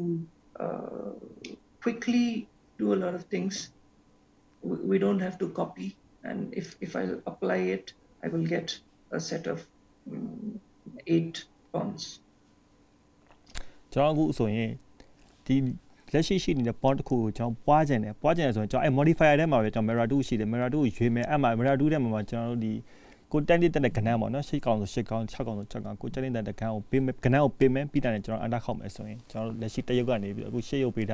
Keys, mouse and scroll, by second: 0.6 scroll down 1, 0.7 scroll up 2, 1.5 shift+middle click, 6.9 click, 13.8 click.